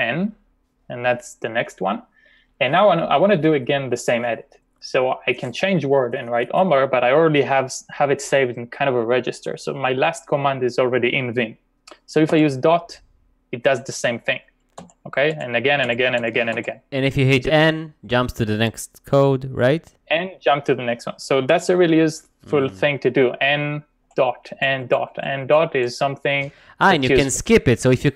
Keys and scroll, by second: 12.3 ., 14.7-17.9 typing, 20.2 n, 23.9-25.6 typing.